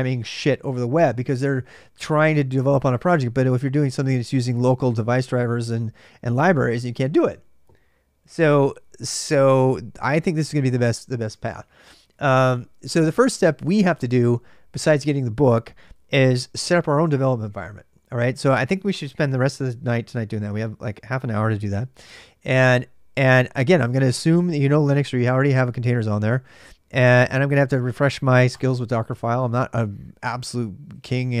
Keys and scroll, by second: 30.7-31.4 typing.